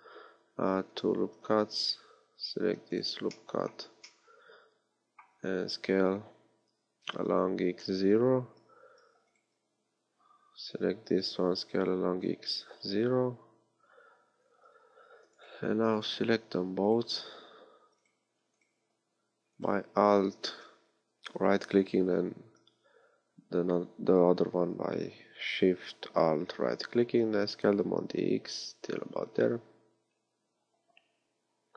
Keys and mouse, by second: 3.0-5.5 drag, 6.8 s, 10.7 s, 27.8 s.